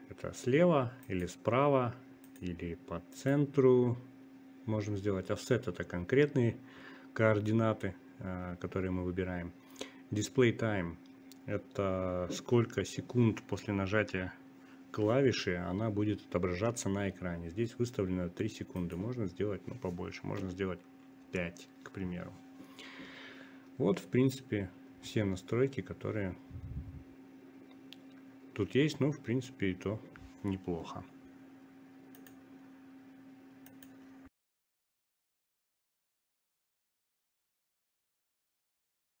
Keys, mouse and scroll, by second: 0.0 click, 5.1-6.7 drag, 8.7 click, 24.3-39.2 drag.